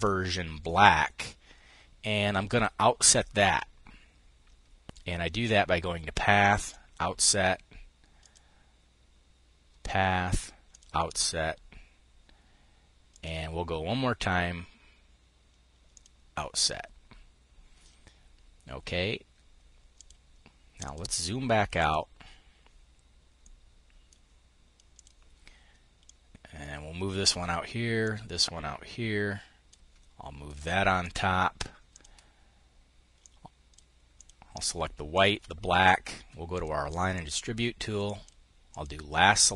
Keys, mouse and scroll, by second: 2.5 click, 6.1 click, 7.7 click, 10.2 click, 12.6 click, 15.4 click, 19.4-20.4 drag, 21.3 click, 22.9-25.3 drag, 25.4-27.4 drag, 27.5-30.6 drag, 31.4 click, 32.6 click, 33.6 click, 34.6 shift+click, 36.0-37.3 drag, 37.5-39.5 drag.